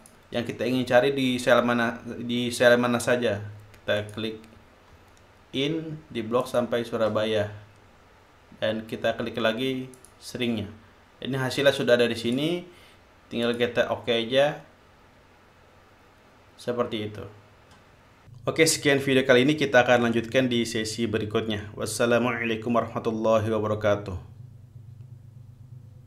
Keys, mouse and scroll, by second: 0.5 click, 4.6 click, 7.1 shift+click, 10.6 click, 12.4 click, 14.1 click.